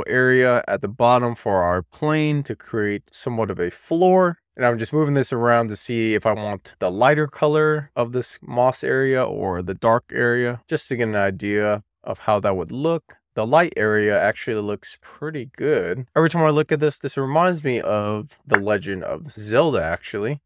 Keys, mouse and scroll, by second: 2.0 click, 2.8 click, 3.7 click, 5.1 click, 6.3-6.8 scroll up 1, 6.8 click, 8.3 click, 8.9 click, 9.9 click, 10.8 click, 11.4 click, 12.1 click, 13.0-14.2 middle drag, 14.4-15.8 scroll up 2, 15.8 click, 16.4 click, 19.0-19.4 scroll down 2, 19.7 scroll up 1, 20.0-20.4 middle drag.